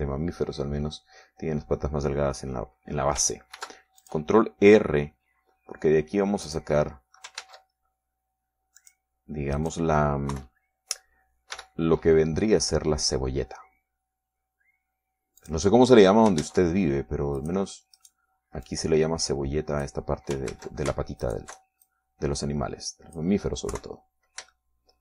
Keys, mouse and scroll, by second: 0.9 KP_3, 5.1 ctrl+r, 5.6 ctrl+click, 8.0 click, 8.9 ctrl+Tab, 10.3 click, 11.1 right click, 11.9 KP_3, 13.1 e, 17.0 click, 18.0 ctrl+Tab, 18.9 click, 19.5 right click, 20.3-21.6 drag, 22.1 ctrl+z, 22.8 alt+shift+right click, 23.4-24.9 alt+shift+drag.